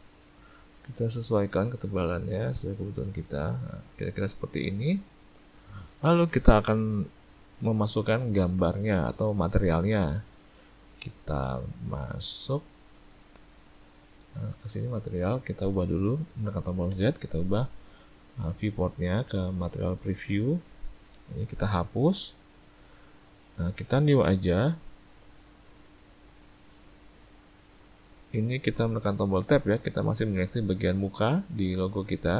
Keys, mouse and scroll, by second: 0.2 middle click, 1.1 click, 4.5 middle click, 5.3 shift+middle click, 8.1 shift+middle click, 12.9 Tab, 15.0 click, 16.9 z, 22.1 click, 24.2 click, 29.5 Tab, 30.1 middle click.